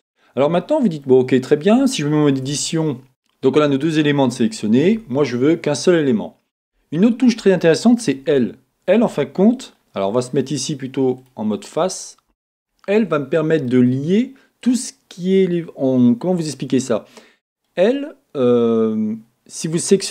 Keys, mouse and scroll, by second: 4.9 a, 12.3 l, 13.7-20.1 middle drag, 17.8-20.1 scroll up 2.